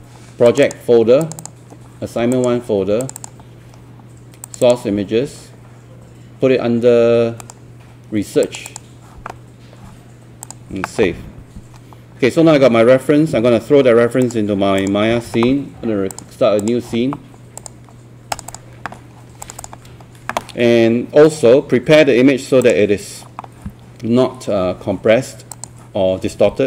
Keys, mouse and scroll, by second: 7.4 right click, 8.5-26.6 drag.